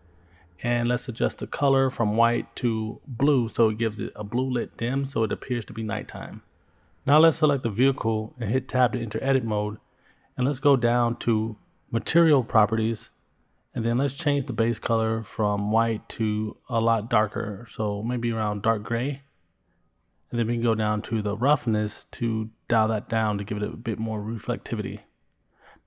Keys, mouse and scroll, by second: 2.1 click, 7.7 click, 9.3 Tab, 15.1 click, 16.2 click, 20.7-21.4 scroll down 5, 22.0-23.0 drag, 22.0 scroll down 1.